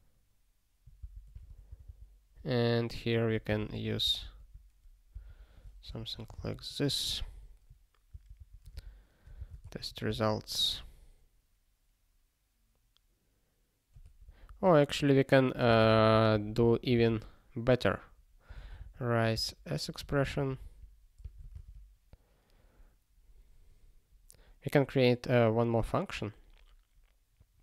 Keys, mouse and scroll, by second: 1.0 Return, 1.4 ctrl+s, 1.7 ctrl+n, 1.9 ctrl+n, 3.1 click, 3.4 ctrl+b, 3.7 alt+d, 4.0 ctrl+n, 4.2 ctrl+a, 5.1 ctrl+alt+k, 6.0 alt+^, 6.4 ctrl+s, 8.1 ctrl+n, 8.3 ctrl+n, 8.7 alt+b, 9.6 alt+d, 10.1 ctrl+s, 14.0 ctrl+p, 15.7 ctrl+b, 16.9 alt+x, 19.3 Return, 20.1 alt+f, 20.2 alt+f, 21.2 alt+d, 21.5 ctrl+s, 22.9 scroll up 1, 24.9-25.6 scroll down 1, 25.6 scroll down 1, 26.2 scroll up 1, 27.3 scroll down 1.